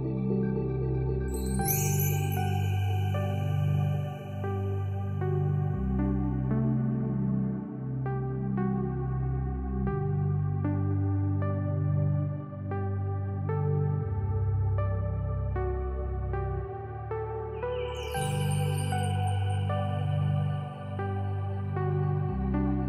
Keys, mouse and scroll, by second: 0.2 click, 1.3 ctrl+d, 1.8 click, 7.7-9.9 drag, 21.4 alt+scroll up 1, 21.9-22.3 alt+scroll down 1, 22.3-22.6 alt+scroll up 1.